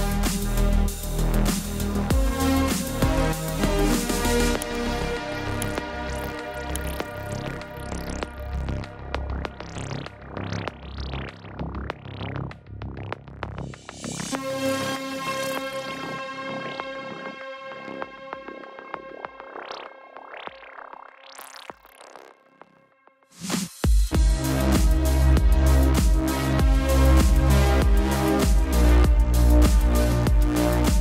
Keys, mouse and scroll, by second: 2.3 click, 6.2 click, 9.8 click, 12.6 click, 14.0 click, 15.3 right click, 17.1 click, 20.8 click, 27.0 click.